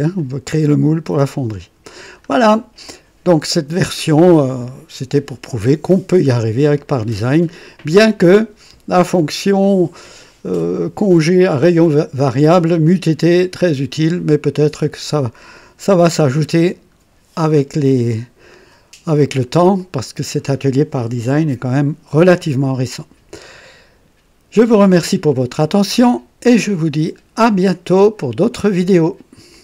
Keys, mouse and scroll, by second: 0.2-2.4 drag, 6.1-7.0 drag, 7.3-8.0 drag, 16.1-17.8 drag, 18.1-19.7 drag, 19.8 click, 25.6-26.8 right drag, 28.5 right click, 29.5 click.